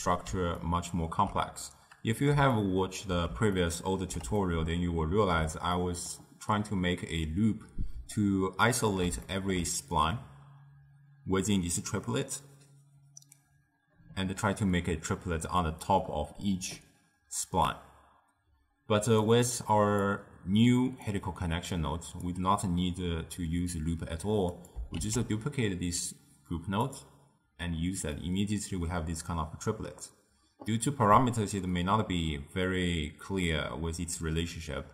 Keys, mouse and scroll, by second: 0.7-12.5 ctrl+middle drag, 19.4 click, 21.2-24.2 drag, 24.6 click, 25.1 shift+d, 28.3-31.3 middle drag, 33.5-34.9 middle drag.